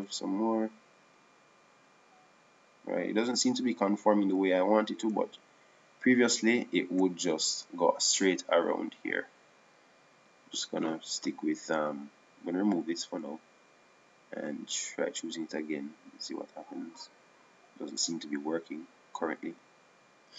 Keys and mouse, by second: 1.2-2.9 right drag, 1.7 s, 6.0-7.6 drag, 11.3-13.2 right drag, 13.3-18.5 drag.